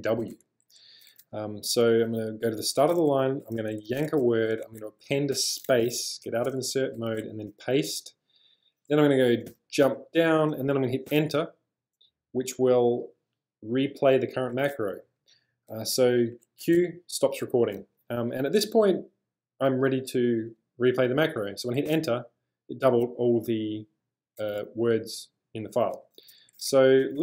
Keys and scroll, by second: 2.6 0, 4.0 w, 4.6 shift+a, 5.4 space, 6.3 ctrl+[, 7.2 p, 9.5 j, 11.2 Return, 16.6 q, 18.4 k, 21.9 Return, 25.9-27.2 typing.